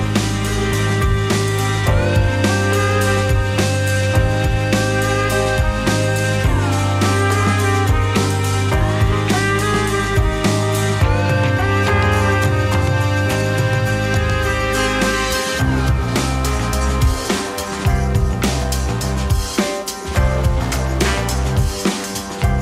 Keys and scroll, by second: 13.4 z.